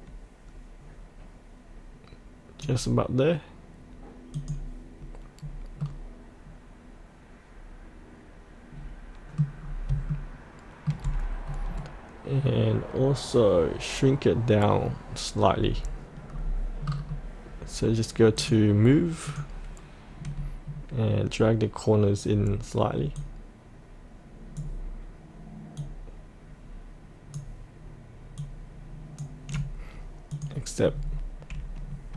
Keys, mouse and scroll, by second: 5.3-5.8 scroll up 1, 5.8-9.5 middle drag, 9.5-9.9 scroll down 1, 10.1 shift+middle click, 15.5-17.1 scroll down 1, 18.4 click, 20.1 scroll down 1, 23.1-30.9 drag, 30.9-31.8 scroll down 1.